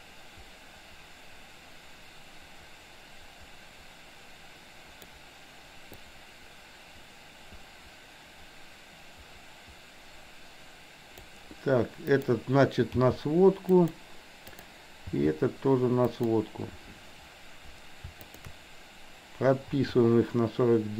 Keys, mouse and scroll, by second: 6.1-11.3 drag, 12.2 click, 12.9 g, 14.6 click, 15.1 g, 18.3 shift+click, 19.8 i.